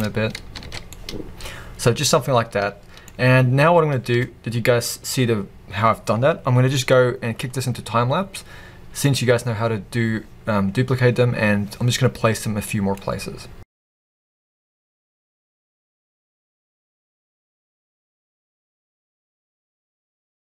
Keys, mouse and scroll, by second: 0.1-0.6 scroll, 0.6 alt+a, 0.9-13.6 middle drag, 3.1-3.7 scroll up 2, 3.7-4.5 scroll down 2, 4.5-7.0 scroll down 1, 7.0-7.8 scroll down 1, 13.6 click, 13.8-15.3 typing, 13.9-14.5 scroll up 3, 13.9-14.8 middle drag, 14.8 click, 15.1 click, 15.2 shift+click, 15.9 shift+middle click, 16.6 scroll, 16.9 click, 17.6 KP_7, 17.8 shift+d, 18.3 r, 18.7 Return, 18.8 g, 19.4-20.2 middle drag, 19.7 alt+a, 20.0 scroll up 2, 20.2 drag.